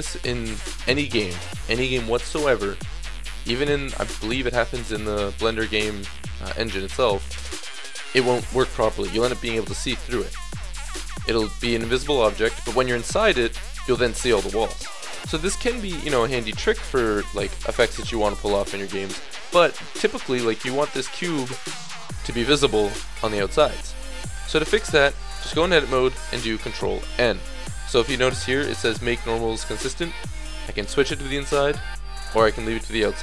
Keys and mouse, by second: 7.1-24.0 middle drag, 24.4-25.0 middle drag, 25.0 Tab, 25.4 click, 26.8 ctrl+n, 30.7 click, 33.1 Tab.